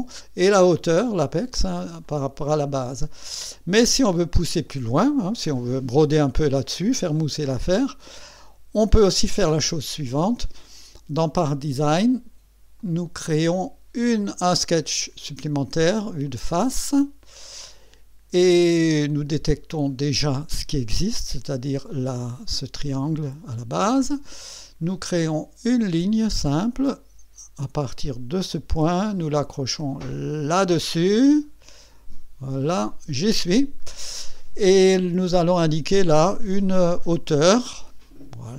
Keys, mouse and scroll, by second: 2.0-3.5 drag, 4.7-5.4 drag, 5.6 scroll up 1, 7.1 right click, 8.0-9.0 drag, 11.5 click, 12.0 click, 12.8 click, 15.0 click, 16.2 click, 17.2 click, 19.8 click, 22.5 click, 25.7 click, 28.4 click, 32.9 click, 33.8 right click, 35.2 right click, 35.9 click, 37.7 click.